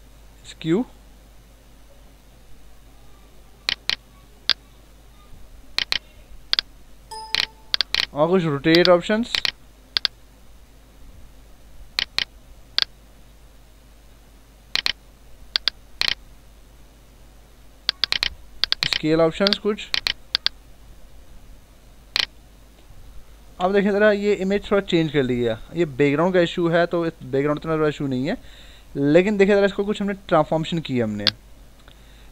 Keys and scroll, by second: 23.4 Return.